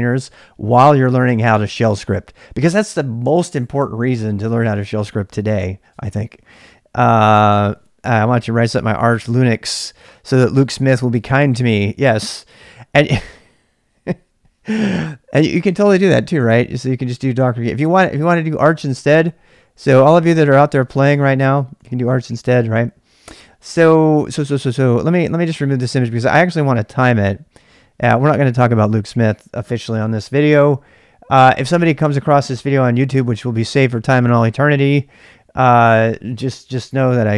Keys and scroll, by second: 21.9 f, 22.2 BackSpace, 22.3 BackSpace, 25.5 ctrl+[, 25.5 k, 25.7 k.